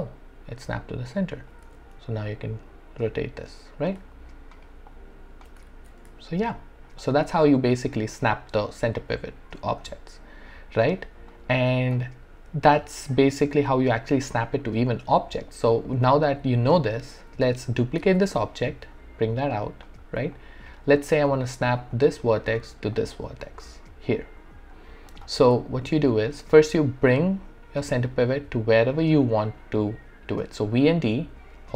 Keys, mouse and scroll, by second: 1.6 alt+e, 2.3-4.1 drag, 4.6 alt+right click, 4.9 alt+click, 4.9 alt+click, 5.7 ctrl+z, 6.2 alt+click, 7.2 w, 9.9 w, 10.5 alt+middle click, 11.0 alt+right click, 11.3-17.7 alt+drag, 17.7 alt+click, 18.0 ctrl+d, 18.9-20.4 drag, 20.4 alt+click, 21.0 alt+right click, 21.9 click, 25.7 alt+middle click, 26.1 alt+right click, 30.7-31.7 typing.